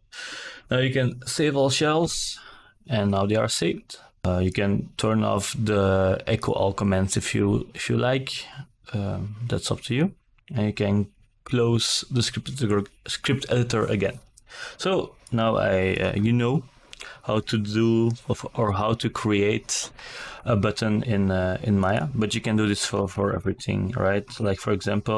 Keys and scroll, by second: 19.6 KP_1, 19.8 KP_0, 20.0 Return.